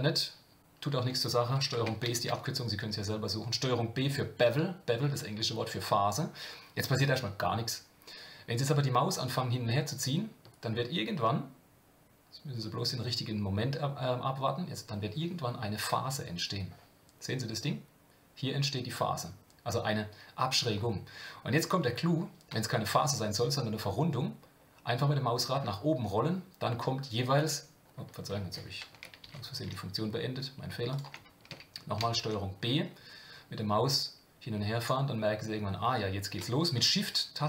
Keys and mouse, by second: 2.1 ctrl+b, 29.2 ctrl+z, 32.0 ctrl+b.